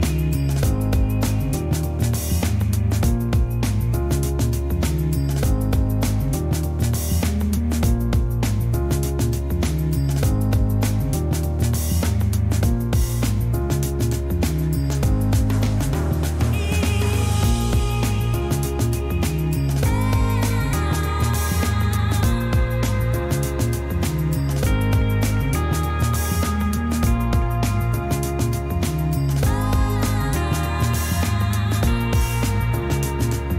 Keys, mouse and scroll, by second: 0.0 w, 0.1 click, 2.1 click, 4.5-4.9 scroll up 2, 5.1 click, 6.9 click, 8.6 click, 10.8 click, 14.9 click, 17.5-19.5 drag, 20.6 click, 22.3 w, 25.7 w, 28.2-29.1 scroll down 2, 29.1-30.0 scroll up 2, 30.5-31.1 scroll down 2, 31.1-31.4 scroll down 1, 33.2 middle click, 33.3 click.